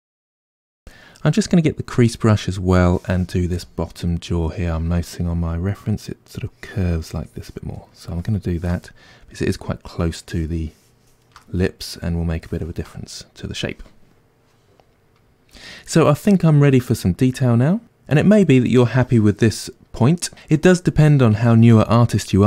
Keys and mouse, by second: 2.8 click, 3.5 f, 6.6-8.9 drag, 8.9-10.7 middle drag, 10.7 shift+click, 11.4-22.4 middle drag.